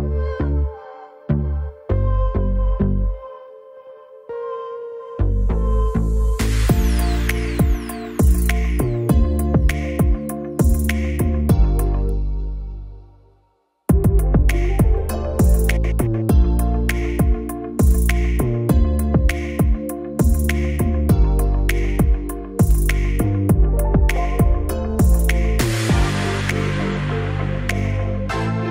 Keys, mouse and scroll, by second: 12.4 click, 15.6 middle click, 17.6-24.3 drag, 26.9-28.7 typing.